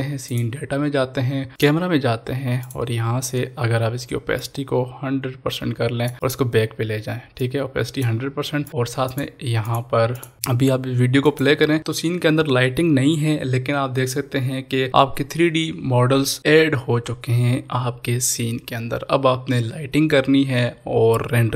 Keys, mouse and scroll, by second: 3.4-4.4 scroll down 1, 4.4-8.7 drag, 10.3 ctrl+s, 11.2 click.